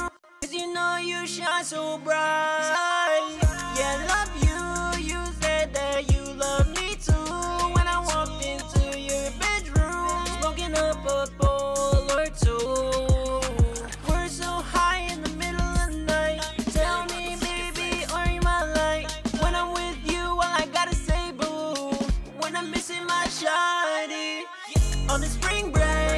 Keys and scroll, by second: 15.5-16.4 typing.